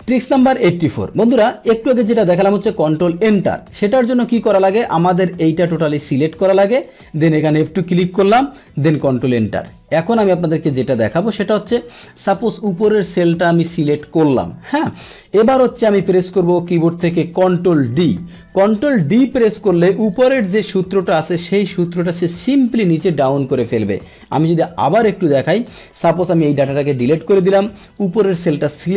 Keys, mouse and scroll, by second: 0.0 Tab, 4.9-8.5 drag, 8.5 ctrl+F2, 9.1 ctrl+Return, 10.8 ctrl+z, 11.2 click, 12.4-16.9 drag, 17.9 ctrl+d, 20.1 click, 21.6-23.0 drag, 24.0-24.4 scroll down 1, 25.6 click, 26.8 Delete, 27.9-28.9 drag.